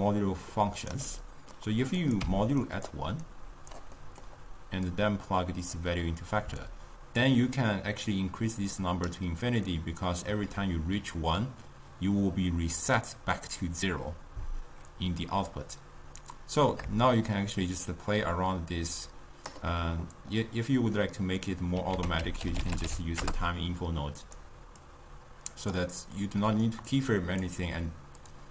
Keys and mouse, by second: 1.1 d, 1.2 middle click, 2.1 click, 3.3 click, 4.0-4.9 middle drag, 4.9-9.7 drag, 15.3-18.3 drag, 21.0 middle click, 22.0 ctrl+a, 24.8-28.5 drag.